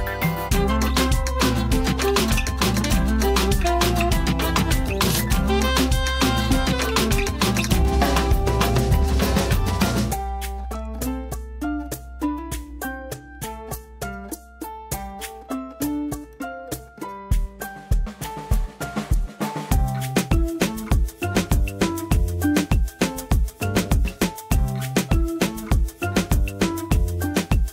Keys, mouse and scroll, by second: 14.4-16.6 typing, 14.5 right click, 14.7 click, 15.5 right click, 15.7 click, 17.0 ctrl+click, 17.5 ctrl+right click, 17.6 click, 20.6 j, 21.3-23.8 drag, 24.5 click, 25.2 ctrl+z, 25.8-27.0 drag.